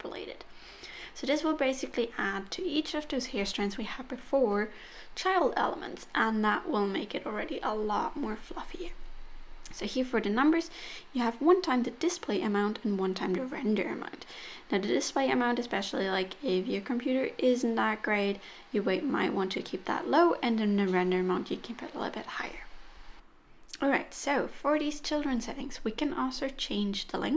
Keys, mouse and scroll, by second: 2.0-2.5 scroll down 1, 6.9 click, 7.2 click, 14.4 click, 15.4 middle click, 18.7 click, 19.4 middle click, 21.6 scroll down 1, 26.0 click.